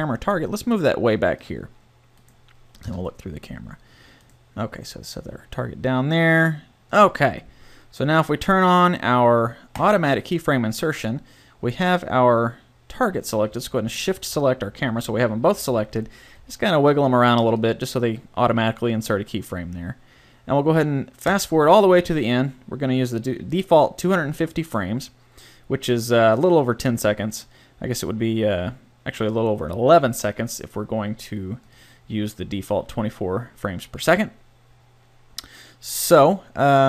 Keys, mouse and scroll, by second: 0.3 g, 2.9 KP_0, 4.3 right click, 4.8 g, 7.2-8.4 drag, 13.9-15.9 right drag, 16.3 g, 17.7-19.4 drag, 21.3-23.1 drag, 33.3 click.